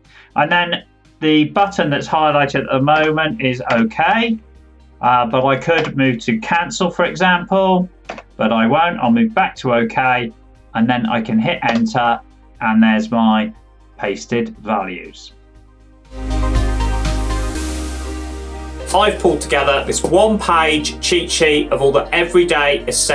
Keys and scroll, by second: 2.8 Tab, 8.0 Down, 11.6 Return.